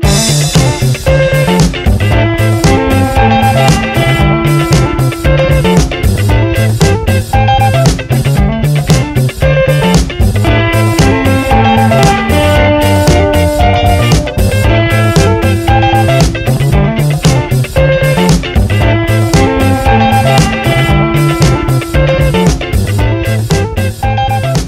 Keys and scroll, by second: 0.4 Return, 4.2 F9, 7.2 i, 11.8 b, 21.8 ctrl+-.